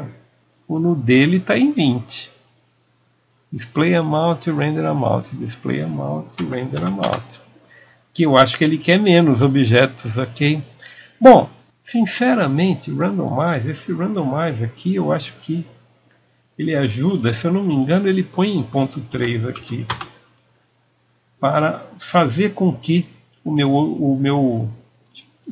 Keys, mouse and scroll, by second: 0.8 KP_Enter, 0.8 click, 3.3 click.